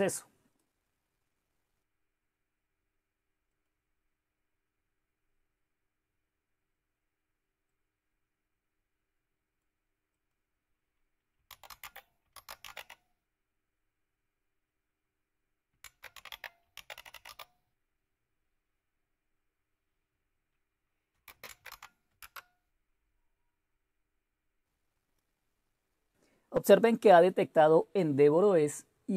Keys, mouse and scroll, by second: 0.1 click, 3.5 click, 4.0-5.1 drag, 7.7-11.3 drag, 11.2-13.2 typing, 15.5-17.7 typing, 21.1-22.1 typing.